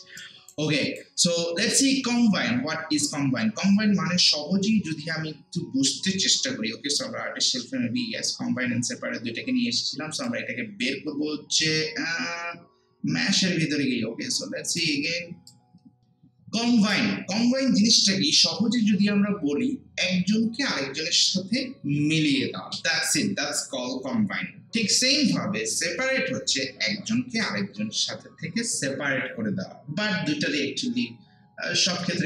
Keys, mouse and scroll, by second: 0.7 alt+click, 6.9 click, 10.1 click, 14.7 click, 16.0 alt+middle click.